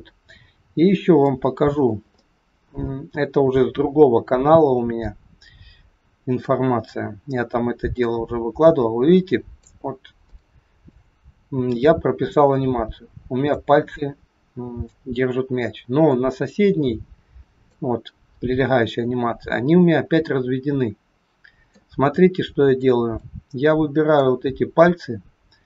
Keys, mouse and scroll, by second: 0.7-1.3 scroll up 2, 1.3 middle click, 1.9 shift+scroll up 1, 2.2 shift+middle click, 2.8 middle click, 8.0 click, 10.2 shift+scroll up 1, 10.3 shift+middle click, 11.7 click, 16.1 click, 22.2 middle click, 23.2 click.